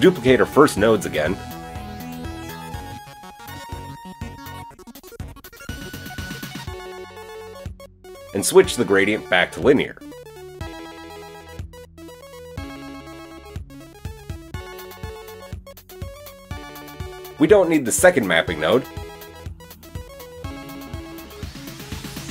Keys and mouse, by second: 0.1 shift+d, 1.2-3.0 shift+middle drag, 3.0-21.5 drag, 21.5-22.3 middle drag.